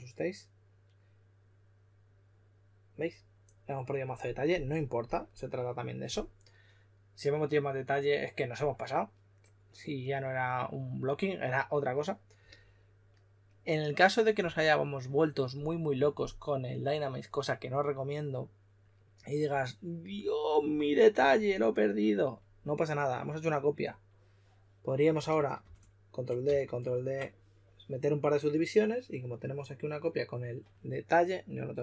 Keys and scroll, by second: 25.5 super+d, 26.4 super+d.